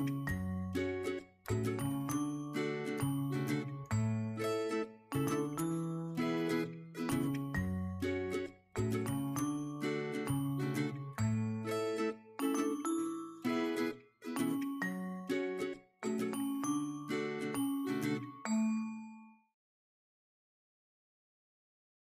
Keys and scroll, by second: 0.6-3.2 typing, 4.7 shift+g, 5.1 shift+., 5.5 shift+super+s, 6.4 super+s, 7.3 shift+Left, 8.4 shift+=, 8.6 shift+', 9.4 shift+h, 11.7-13.1 typing, 15.4-16.3 typing, 17.5 shift+=, 17.9 shift+[, 19.0 shift+'.